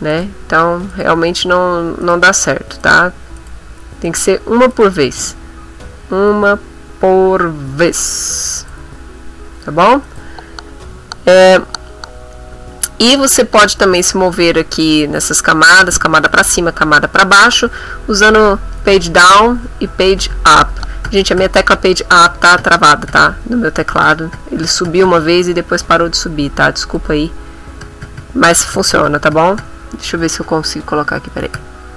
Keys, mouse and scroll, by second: 0.1 shift+click, 0.9 click, 2.0 click, 2.8 click, 3.4 click, 4.0 click, 4.7 click, 8.6 click, 10.0 click, 18.4 Page_Up, 18.9 Page_Down, 20.7 Page_Down, 23.6 Page_Down, 26.8 click, 28.8 Page_Down, 29.4 Page_Down, 31.6 Num_Lock.